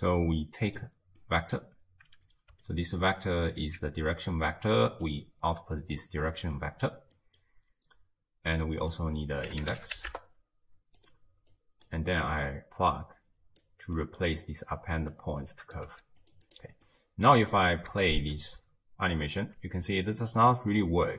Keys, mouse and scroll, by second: 1.2-2.6 middle drag, 2.6-5.1 alt+right drag, 5.1 click, 6.6 click, 7.2-8.7 middle drag, 8.7 drag, 11.6 click, 12.4 click, 14.0 middle click, 14.4-15.1 scroll down 1, 15.1 click, 15.9 g, 16.5 click, 16.9-18.1 middle drag, 18.1 shift+space, 19.9 space.